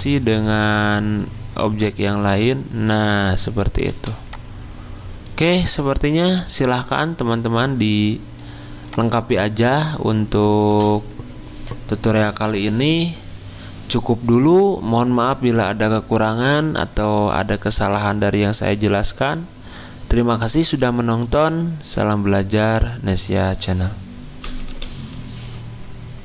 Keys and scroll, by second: 3.8 v, 10.7 f, 24.6 Escape.